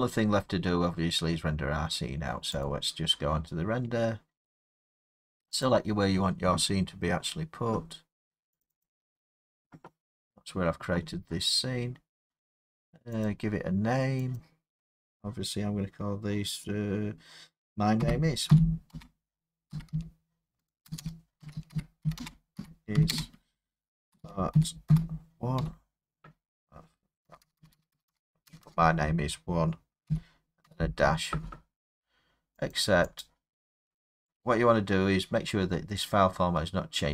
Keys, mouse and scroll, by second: 2.6 click, 5.7 click, 8.6 click, 8.8 click, 13.3 click, 14.4 click, 18.0-18.5 typing, 19.7-25.6 typing, 27.2-28.6 typing, 29.8-30.7 typing, 32.7 click, 33.2 click.